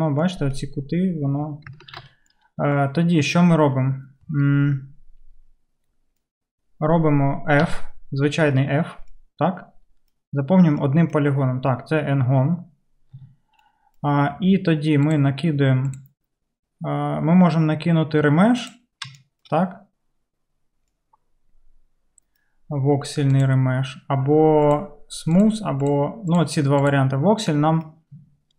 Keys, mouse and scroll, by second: 1.9 ctrl+z, 7.7 f, 13.2 Tab, 23.5-26.3 middle drag, 25.3 click, 26.3 click, 26.5 middle click, 27.0 middle click.